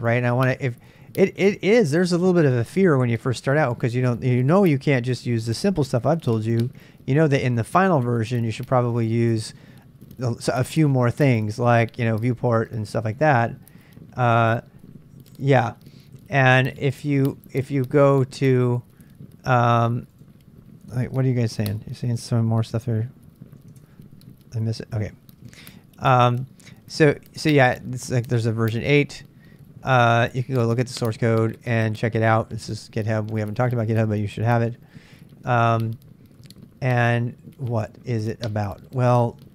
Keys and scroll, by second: 23.6 ctrl+b, 23.9 ctrl+k, 24.0 ctrl+k, 25.5 super+Tab.